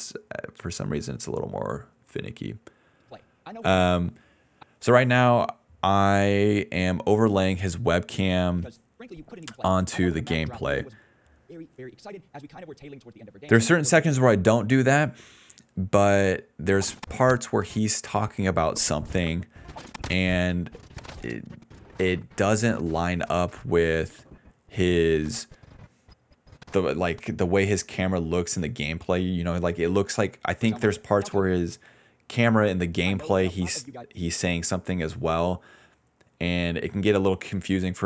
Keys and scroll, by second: 3.0 space, 3.1 d, 3.7 space, 5.0 a, 8.4 ctrl+s, 8.5-12.4 typing, 14.1 space, 27.7 i, 28.6 o, 30.0-34.0 typing, 35.9-37.3 typing.